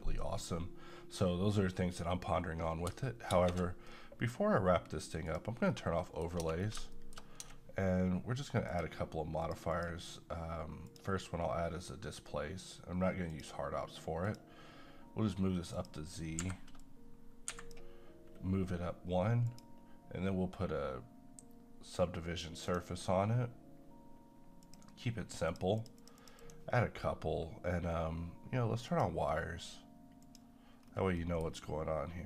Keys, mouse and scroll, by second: 3.3 space, 3.9-5.3 middle drag, 5.3 click, 5.7-6.0 scroll down 1, 6.0 middle click, 6.4 Tab, 6.6 scroll down 1, 7.0 shift+middle click, 7.4 Tab, 8.7 click, 13.3 click, 16.4 Escape, 16.8 click, 17.5 Escape, 19.4 click, 22.7 click, 28.9 click, 30.8-31.2 scroll up 1, 31.2 middle click.